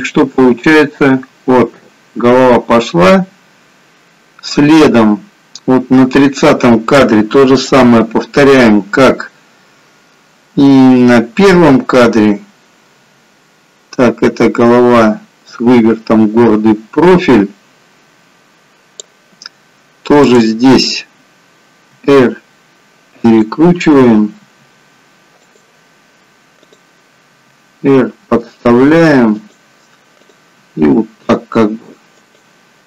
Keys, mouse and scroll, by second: 8.8 click, 20.3 click, 22.1 r, 24.6 r, 26.7 click, 27.6 r, 29.7 r, 30.6 click, 30.9 r.